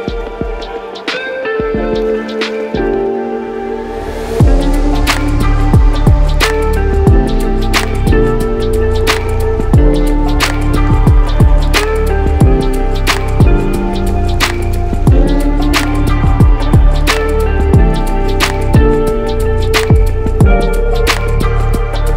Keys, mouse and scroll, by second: 0.5 click, 2.2 c, 2.3 c, 20.7 Escape.